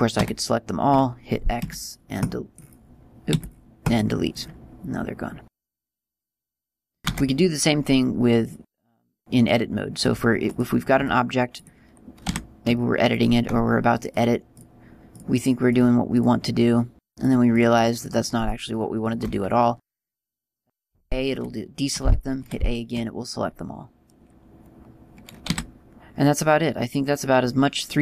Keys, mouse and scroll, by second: 0.2 a, 3.0 click, 3.8 x, 5.4-5.7 scroll down 1, 5.9-7.5 scroll down 3, 7.5 shift+a, 11.0 click, 12.1 click, 12.7 Tab, 13.5 right click, 14.6 shift+right click, 15.6 shift+right click, 21.8 a.